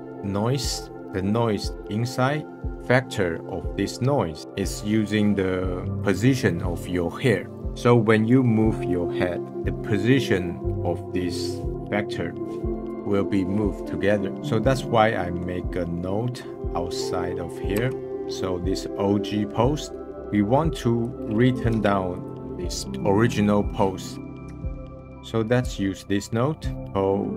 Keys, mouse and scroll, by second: 0.0-0.5 scroll up 1, 0.5-1.0 scroll up 1, 1.3-1.7 scroll up 1, 16.2 middle click, 18.2-19.2 scroll up 1, 20.1-20.8 drag, 21.7 g, 22.9 scroll down 3, 23.6 scroll down 7, 24.0 middle click, 24.2 Down, 26.1 scroll up 4.